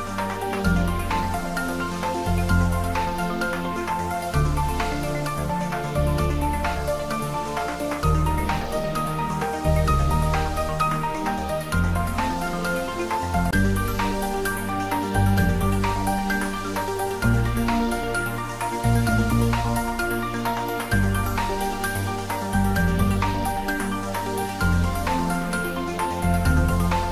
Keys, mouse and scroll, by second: 0.3 middle click, 1.5 scroll down 1, 2.7-4.2 middle drag, 4.2 e, 5.9 click, 6.4-6.8 scroll up 1, 7.0-9.3 middle drag, 9.3 click, 10.2 scroll down 1, 11.4 click, 13.2 shift+z, 14.5 shift+z, 14.8-16.8 middle drag, 16.6-17.8 typing, 22.7 click, 23.4 Tab, 23.7 middle click, 24.9 scroll up 1, 25.3-27.1 middle drag.